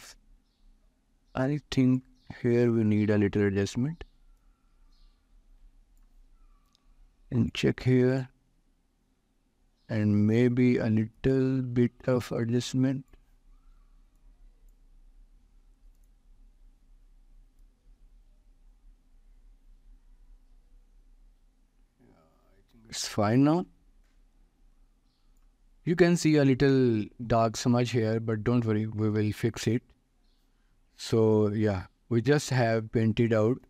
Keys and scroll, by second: 29.6 ctrl+s.